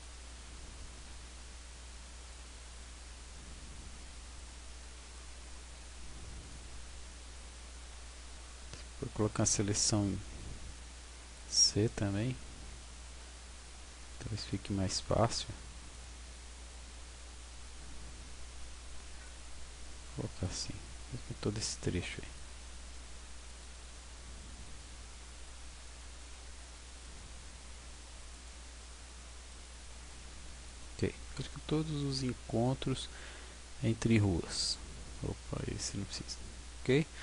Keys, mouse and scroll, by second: 0.3 b, 2.6 b, 5.7 b, 9.8 c.